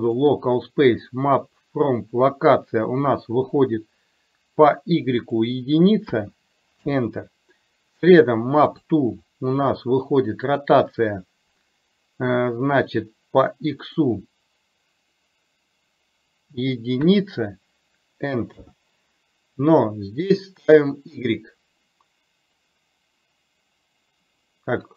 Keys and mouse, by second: 0.9 click, 5.5-6.9 drag, 8.7 click, 10.6 click, 13.9-18.7 drag.